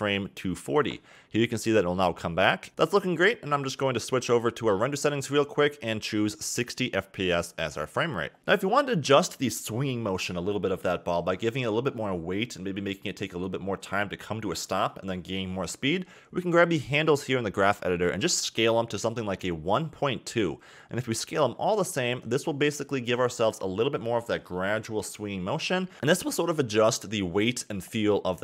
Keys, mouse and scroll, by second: 3.7 click, 5.3-7.8 drag, 8.2 click, 16.3 click, 17.1 click, 18.2-19.1 scroll up 6, 20.9-23.3 scroll down 1, 23.3 s, 26.3 click, 26.8 s.